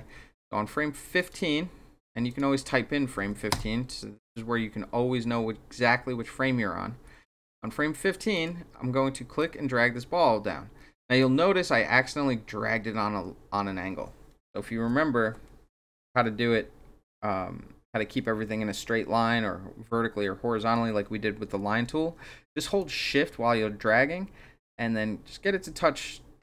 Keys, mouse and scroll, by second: 1.2 click, 2.3 click, 3.2 KP_5, 3.2 KP_1, 3.5 Return, 8.3 click, 9.4-11.2 drag, 14.7 ctrl+z, 22.8-25.4 shift+drag.